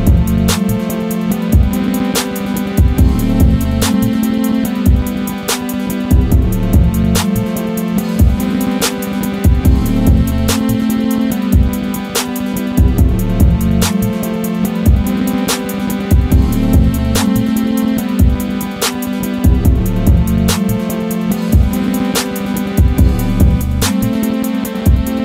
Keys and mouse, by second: 0.5 click.